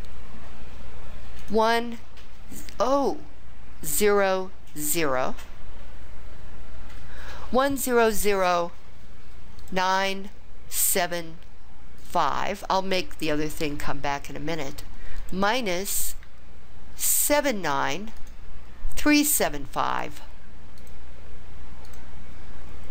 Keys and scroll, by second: 1.5 1, 4.0 0, 4.9 0, 9.7 9, 11.0 7, 12.1 5, 15.3 -, 17.3 7, 18.3 9, 20.0 3, 20.9 7, 22.0 5.